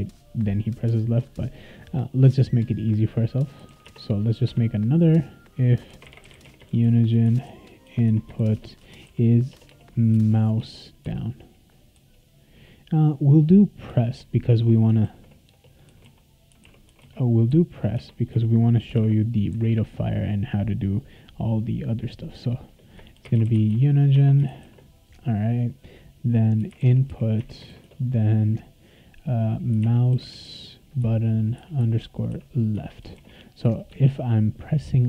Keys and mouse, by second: 3.3-4.2 typing, 4.4 Tab, 5.6-11.0 typing, 13.9 Return, 15.0 ctrl+z, 15.5-17.5 typing, 17.9 Tab, 18.6-19.4 typing, 22.9-24.6 typing, 26.3-27.8 typing, 29.5-30.9 typing, 32.8 Return, 33.1 ctrl+s.